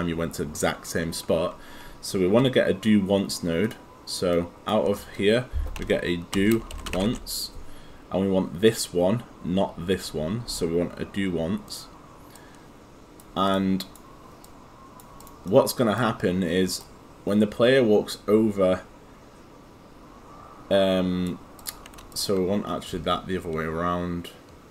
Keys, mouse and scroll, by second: 5.8-7.6 typing, 12.2 click, 15.5 right click, 17.3 click.